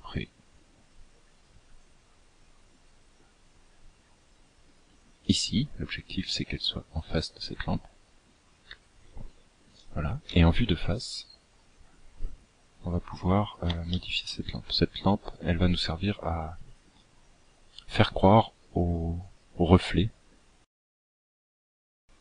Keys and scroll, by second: 8.9 KP_1.